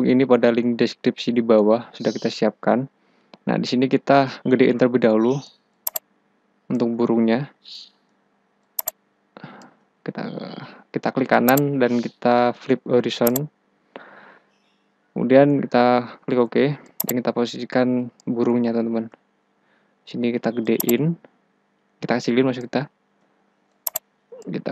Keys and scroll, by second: 16.0 Return, 19.6 ctrl+t, 23.3 Return.